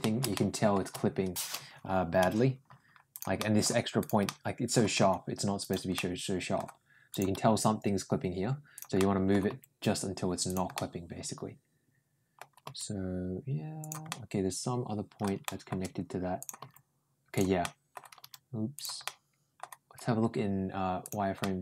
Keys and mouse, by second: 0.1 shift+middle click, 2.0 n, 2.9 click, 3.2 middle click, 3.8 click, 4.1 middle click, 4.8 g, 5.8 middle click, 6.9 click, 7.2 g, 8.8 middle click, 9.3 g, 10.6-12.2 middle drag, 13.9-15.0 middle drag, 13.9 g, 15.3 middle click, 16.2 click, 16.4 g, 17.4 middle click, 18.0 g, 18.8 middle click, 20.8 click, 21.2 middle click.